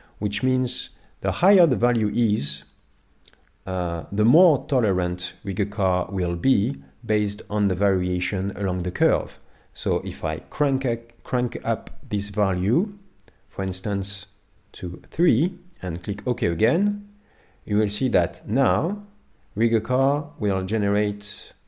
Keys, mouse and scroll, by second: 18.1 middle click.